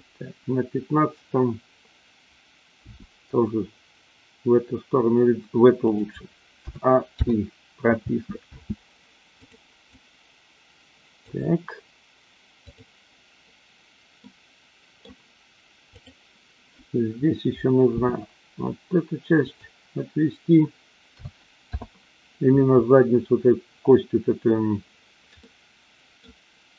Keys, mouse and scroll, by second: 2.9 g, 5.9 click, 6.5 a, 7.2 i, 8.0 space, 8.5 space, 9.4 click, 10.0-11.4 drag, 12.5-13.4 drag, 14.1-15.0 middle drag, 15.8 click, 17.8 r, 19.5 click, 21.1 a, 21.6 i, 25.3-26.2 middle drag.